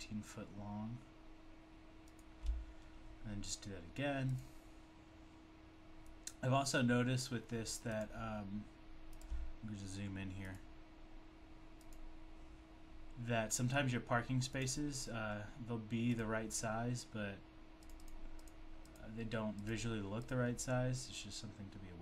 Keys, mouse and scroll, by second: 2.1 shift+double click, 2.1 double click, 8.0 click, 10.4 click, 14.6 click, 16.1 click, 17.9 click, 18.1 double click, 18.5 double click, 18.9 click.